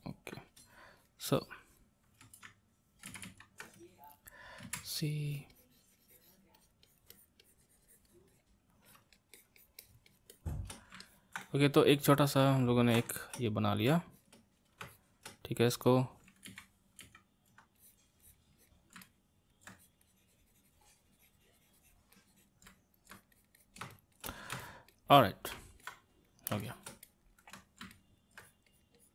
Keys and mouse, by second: 1.0-2.4 drag, 2.4 ctrl+z, 3.1 ctrl+z, 3.3 ctrl+z, 4.6 c, 5.0-11.0 drag, 11.0-14.1 ctrl+middle drag, 14.1-16.5 shift+drag, 16.5 ctrl+z, 17.1 ctrl+z, 17.8-19.0 drag, 19.0 middle click, 19.7-22.7 drag, 22.7 middle click, 23.1-25.8 drag, 25.8-28.4 ctrl+middle drag, 28.4-29.1 drag.